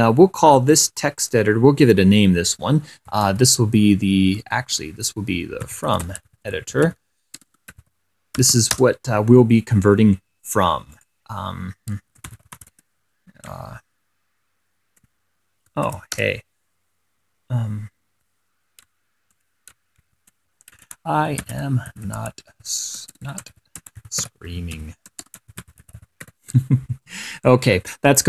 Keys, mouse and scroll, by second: 1.0 click, 1.6 click, 3.2-4.6 typing, 5.7-9.3 typing, 11.2-11.6 scroll up 2, 12.2-13.4 typing, 16.1 shift+7, 16.5 shift+BackSpace, 20.3-27.0 typing.